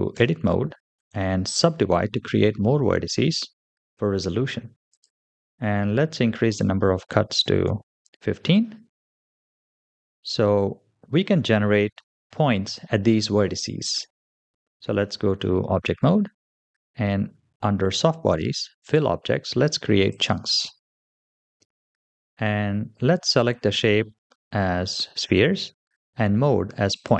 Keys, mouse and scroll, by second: 0.0 Tab, 0.8 right click, 4.7 click, 6.4-7.8 drag, 9.3-10.2 middle drag, 15.5 Tab, 18.7 click, 19.9 click, 21.0-23.0 scroll down 5, 26.8 click.